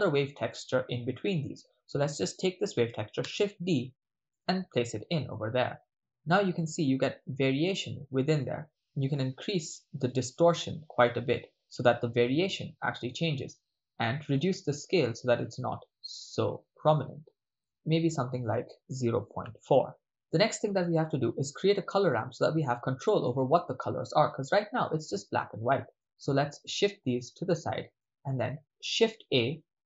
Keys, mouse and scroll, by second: 0.5 ctrl+middle click, 1.2 middle click, 3.2 shift+d, 4.5 click, 6.4-7.3 ctrl+middle drag, 10.1-12.1 drag, 13.1 ctrl+middle click, 14.3 click, 14.7 click, 15.1 click, 15.4 click, 16.3 click, 16.6 click, 17.5 click, 17.7 click, 18.4-19.8 drag, 20.0 ctrl+middle click, 20.9-22.2 middle drag, 22.5-23.0 ctrl+middle drag, 24.3-24.7 drag, 25.1 click, 26.1 click, 27.3 click, 28.0-28.4 middle drag, 29.1 shift+a.